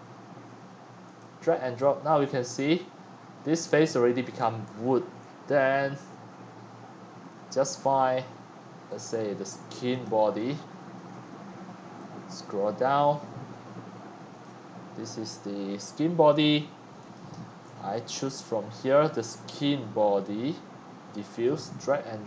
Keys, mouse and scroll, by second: 1.7-2.1 scroll down 4, 2.1-2.9 right drag, 3.0 scroll down 2, 3.2 scroll up 3, 4.1 scroll down 2, 5.2 scroll down 2, 5.8 scroll down 1, 6.6-8.9 middle drag, 6.6-8.8 scroll down 6, 8.8-10.0 scroll down 1, 10.0-18.1 drag, 18.2-22.2 drag.